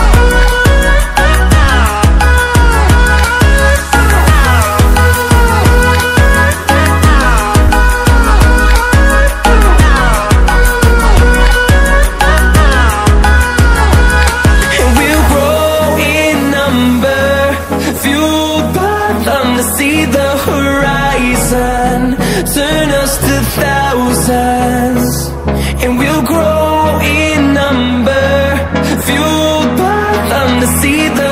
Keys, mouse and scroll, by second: 3.5-7.3 drag, 8.0 ctrl+a, 9.1 Up, 11.8 Down, 13.6 click, 16.6-17.4 ctrl+alt+scroll down 1, 19.2 click, 20.4 ctrl+alt+scroll down 1, 21.7-29.2 drag, 29.7 ctrl+alt+scroll down 1, 30.5 ctrl+alt+scroll up 1, 31.1-31.3 drag.